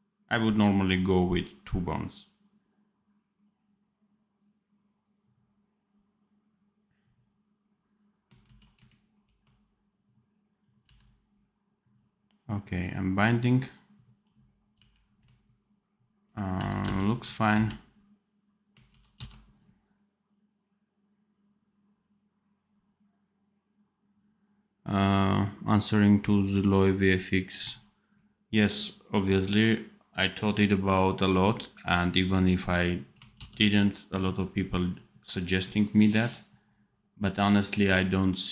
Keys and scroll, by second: 8.3 ctrl+z, 9.1 ctrl+b, 10.7 v, 14.7 g, 16.4 v, 16.7 space, 17.4 c, 18.8 ctrl+z, 19.1 ctrl+s, 33.3 ctrl+s.